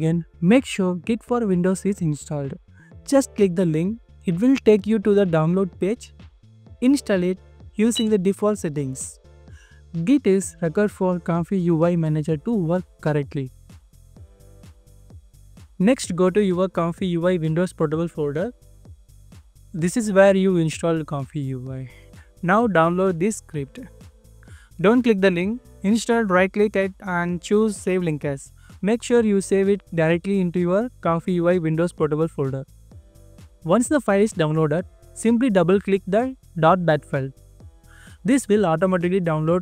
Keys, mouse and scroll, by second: 4.0 right click, 5.0 scroll up 1, 7.4 scroll down 1, 17.2 scroll down 1, 22.9 right click, 25.6-26.3 scroll down 1, 26.3-27.4 scroll up 1, 27.4 double click, 35.4-36.1 ctrl+scroll down 1, 37.9 double click.